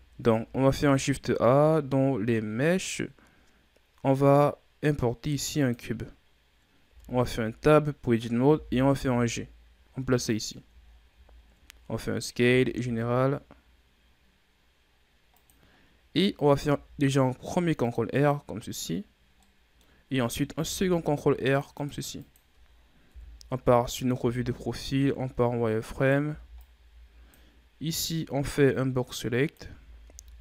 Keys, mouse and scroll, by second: 0.0-0.6 ctrl+scroll up 2, 0.6 shift+a, 6.8 Tab, 8.4 g, 10.7-11.1 shift+scroll down 5, 11.1-12.4 scroll up 8, 12.4 s, 16.6 ctrl+r, 19.3-20.6 middle drag, 20.6 ctrl+r, 22.1 click, 23.0 KP_3, 24.1 z, 24.7-25.9 ctrl+scroll down 3, 25.9 right click, 26.1 b, 28.0-29.5 drag, 29.5 a, 30.0 a.